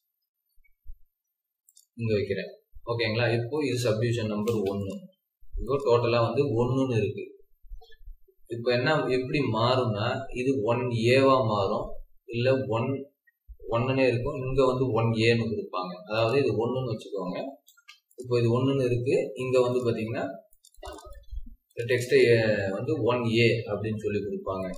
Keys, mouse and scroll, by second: 0.4 scroll up 1, 1.0-1.7 typing, 1.9 Escape, 2.1 scroll down 3, 3.5-4.2 scroll down 1, 4.3 typing, 6.0 Escape, 16.8-18.0 typing, 19.2-19.7 scroll up 1, 20.0 Escape, 20.7 double click, 21.1 Escape, 21.9 double click.